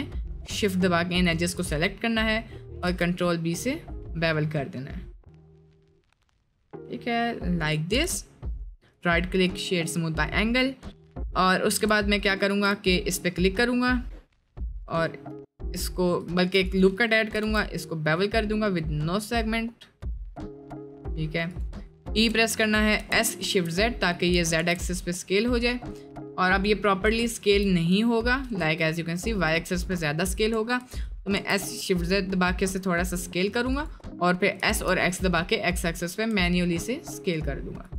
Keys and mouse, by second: 2.2 middle click, 2.6 middle click, 2.9 ctrl+b, 7.9 Tab, 8.1 middle drag, 8.5 middle drag, 8.9 click, 11.5 middle click, 11.8 Tab, 12.5 1, 12.8 alt+click, 14.7 middle click, 16.4 ctrl+r, 17.0 middle click, 22.1 e, 23.0 s, 24.3 s, 27.3 shift+middle click, 28.0 shift+click, 28.6 s, 29.7 shift+click, 30.5 s, 34.5 s.